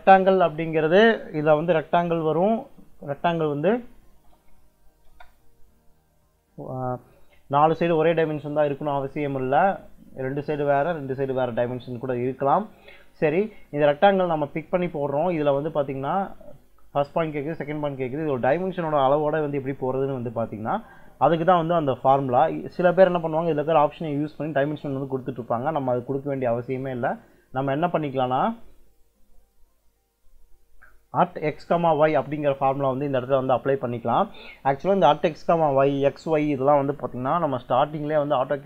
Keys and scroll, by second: 3.8-5.0 typing, 15.2 space, 27.0 Escape.